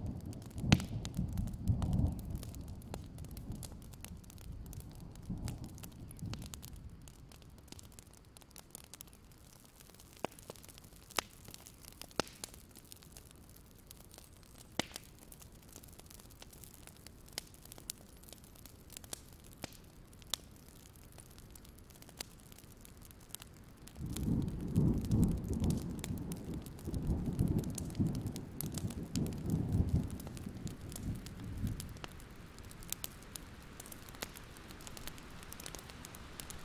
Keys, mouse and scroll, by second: 1.7-2.3 scroll down 3, 2.3 click, 3.2 alt+scroll down 1, 3.5 right click, 4.6 click, 5.8 alt+scroll up 1, 6.0-7.7 alt+drag, 8.0-8.7 scroll down 1, 8.7 click, 9.2 alt+click, 9.8-12.7 drag, 13.5-14.1 alt+scroll up 1, 14.1-15.2 drag, 15.3-16.2 alt+scroll down 2, 16.5-17.2 scroll up 1, 17.2 click, 17.4 alt+scroll up 1, 18.0 click, 18.1 alt+scroll down 1, 18.4-19.9 alt+scroll up 1, 19.9-21.7 drag, 22.2-23.0 scroll down 3, 23.4 click, 24.5-26.0 scroll up 1, 26.1-26.7 alt+scroll up 1, 26.7 click, 26.9 alt+scroll down 1, 27.0-27.8 scroll up 1, 27.8-29.7 drag, 30.0-31.2 scroll down 1, 31.2-35.2 drag, 35.7 right click, 36.4 click, 36.5-36.6 scroll down 1.